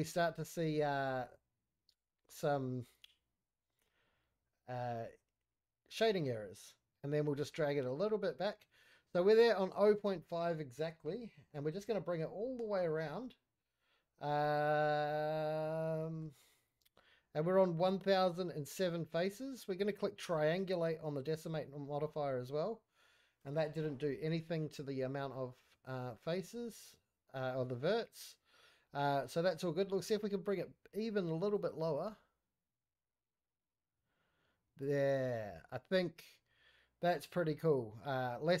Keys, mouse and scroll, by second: 2.7-8.8 drag, 9.8 scroll down 3, 10.1-10.5 middle drag, 10.7 scroll up 3, 10.9-11.5 middle drag, 11.6 scroll up 1, 11.8-12.6 middle drag, 12.6 shift+scroll down 1, 12.7 shift+middle drag, 13.2-13.6 scroll down 1, 13.6-14.4 middle drag, 14.6-16.2 middle drag, 16.7-17.9 scroll up 2, 20.3 click, 21.5 scroll down 1, 21.8 middle click, 23.0-23.4 middle drag, 23.6 scroll up 1, 23.7-24.4 middle drag, 24.9 middle click, 26.0-26.5 scroll down 1, 26.5 middle click, 28.8 middle click, 29.8 middle drag, 31.5-34.8 drag, 35.2-37.2 middle drag, 37.4-38.2 scroll up 1, 38.2-38.6 scroll up 1.